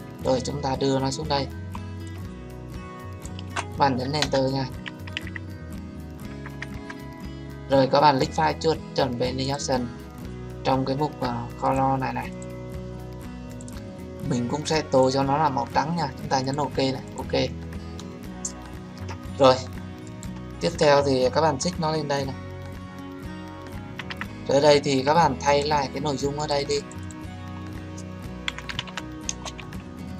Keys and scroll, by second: 4.2 Return.